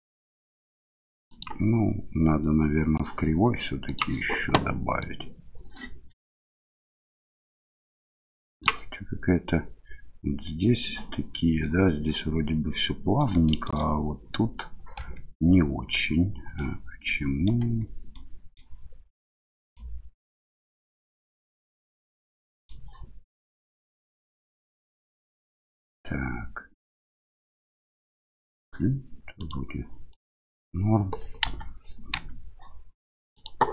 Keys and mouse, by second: 1.3 click, 5.0-8.7 drag, 13.4 shift+drag, 14.9 Tab, 16.5 middle click, 17.6 Tab, 18.1-18.5 middle drag, 19.7-22.7 middle drag, 29.4 click, 30.1 click, 31.4 KP_1, 33.3 click.